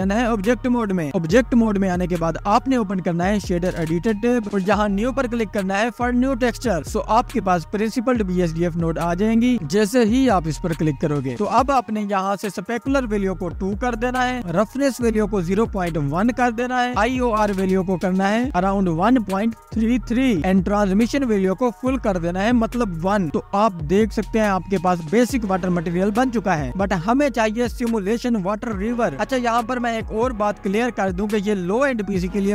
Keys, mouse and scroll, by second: 1.7 ctrl+s, 2.0 click, 5.5 ctrl+s, 6.1-7.6 scroll up 1, 7.8-8.9 drag, 8.9 scroll up 2, 9.5-10.8 middle drag, 10.8-11.6 scroll down 1, 11.6 click, 12.6-14.9 drag, 15.8-17.7 drag, 18.4-21.5 drag, 22.9-25.2 drag, 32.3-32.5 scroll up 1.